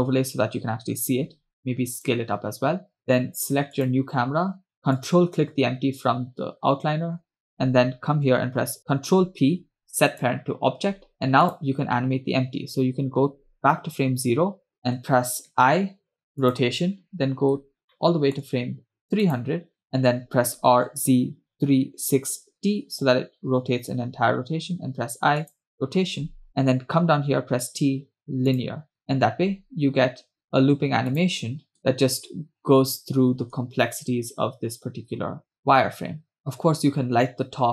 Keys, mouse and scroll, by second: 1.4 s, 3.9 click, 5.2 ctrl+click, 8.8 shift+p, 9.3 shift+p, 11.7 click, 14.0 Left, 14.8 click, 15.5 i, 17.7-18.0 scroll down 2, 18.1-18.7 middle drag, 19.5 click, 19.8 Right, 21.1 r, 25.7 i, 27.5 t, 29.3 space, 31.2 space, 31.3 click, 31.8 space, 36.4 space.